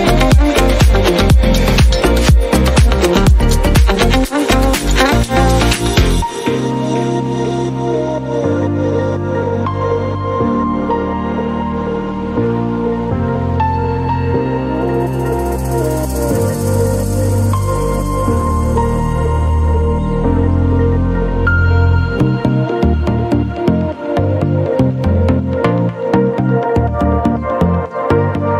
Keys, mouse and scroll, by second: 3.5 click, 5.6 click, 8.2 click, 8.7 click, 9.8-14.1 typing, 14.9 Return, 17.4 click, 18.3 click, 21.0 click, 23.0 right click, 23.7 click, 24.6 click, 25.9 click, 27.5 click, 28.4 click.